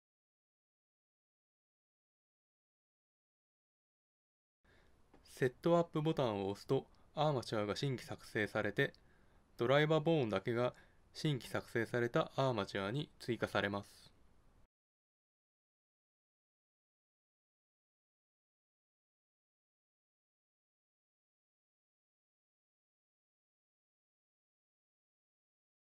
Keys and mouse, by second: 6.2-8.1 drag, 11.9-13.2 drag, 13.2 Tab, 15.3 Tab, 16.9 ctrl+Tab, 18.3 g, 21.0 g, 22.4 g, 22.8 click, 23.2 click, 25.5 ctrl+n.